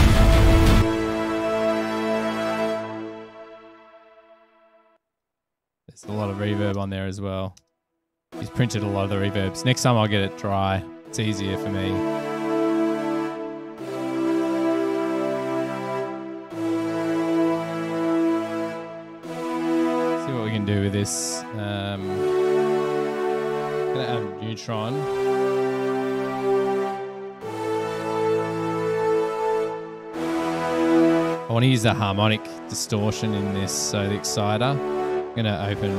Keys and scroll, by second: 5.1 space, 5.3 space, 6.9 space, 7.7 space, 23.9-27.7 typing, 29.1 Page_Down, 29.8 Return.